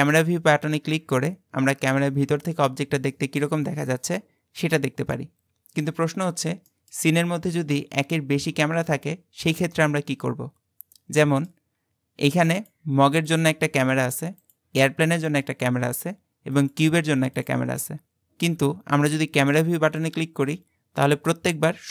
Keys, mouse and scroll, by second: 6.7 middle click, 7.3-8.7 scroll down 3, 9.5-11.8 middle drag, 11.8-12.6 scroll down 1, 12.6 click, 13.3 click, 14.5 click, 15.3 click, 16.6 click, 17.4 click, 19.9 click.